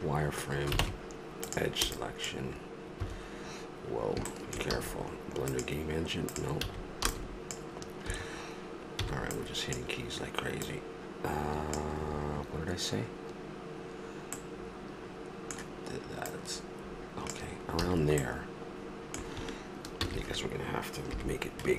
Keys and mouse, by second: 0.8 ctrl+Tab, 3.0 Escape, 4.7 a, 5.5-7.3 drag, 6.6 a, 7.1 v, 10.1 b, 10.6-14.4 drag, 14.4 middle click, 16.3-17.9 drag, 17.8 a, 20.0 ctrl+z, 21.1 KP_Decimal.